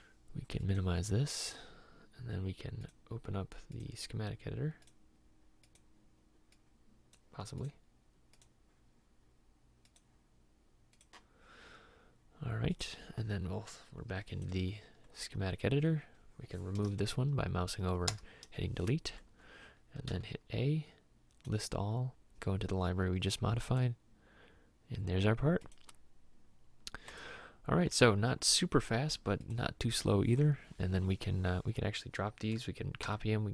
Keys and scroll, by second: 18.2 Delete, 20.1 a, 33.1 c.